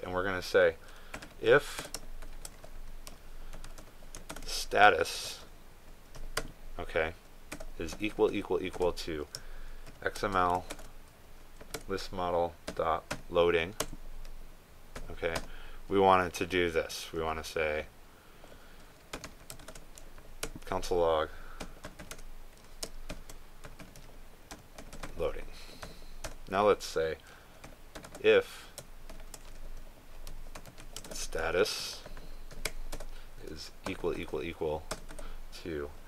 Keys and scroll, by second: 5.3 ctrl+space, 11.7 ctrl+space, 20.7 ctrl+space, 32.1 ctrl+space.